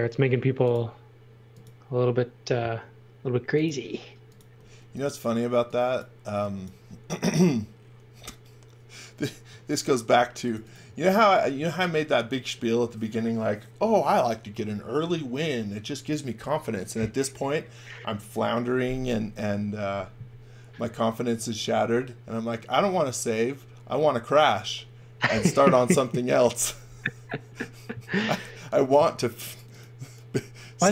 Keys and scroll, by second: 4.5 e, 9.6 shift+3, 10.3 space, 11.5 x.